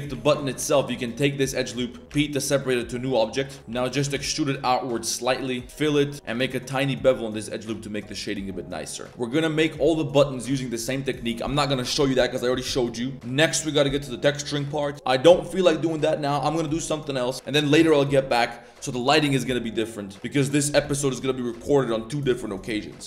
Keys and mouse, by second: 0.1 a, 0.6 a, 1.0 alt+click, 2.1 p, 3.0 Tab, 3.2 click, 3.7 e, 3.9 g, 5.6-6.1 typing, 5.8 shift+middle drag, 6.1 ctrl+b, 6.4 ctrl+b, 8.4 middle click, 17.3 middle click, 17.7-18.2 middle drag, 23.0 right drag.